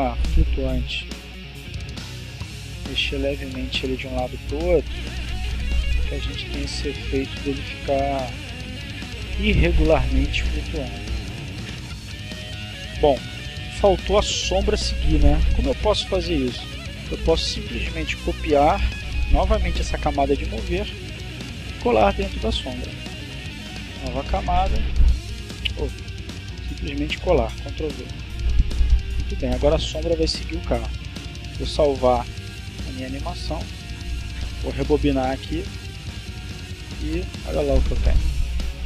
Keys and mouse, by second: 0.9 click, 2.2-3.4 drag, 4.0-5.1 drag, 5.8-7.1 drag, 7.6-8.9 drag, 9.9 click, 12.3 click, 17.4 right click, 19.3 click, 21.3 click, 22.1 right click, 26.0 click, 27.3 ctrl+v, 28.9 click, 30.3 click, 31.6 click, 32.9 click, 34.2 click, 35.8 click.